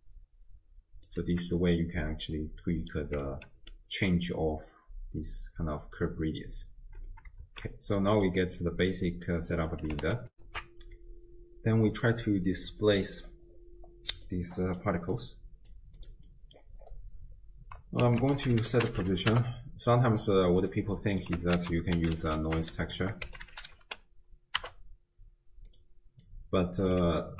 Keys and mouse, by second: 2.5-2.9 drag, 3.3 shift+space, 6.8 space, 7.5 shift+space, 8.0 click, 8.8 click, 10.3 ctrl+alt+shift+w, 10.5 ctrl+alt+shift+q, 12.9 click, 14.3-14.8 drag, 15.1 click, 16.0 click, 16.3 middle click, 18.1 ctrl+a, 21.0 click, 21.2 middle click, 21.6 ctrl+a, 22.8 BackSpace, 22.9 BackSpace, 26.3-26.9 drag.